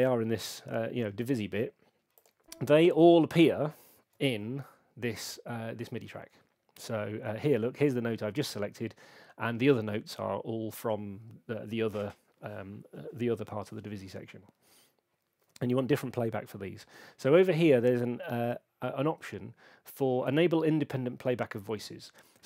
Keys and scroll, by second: 4.1 super+4.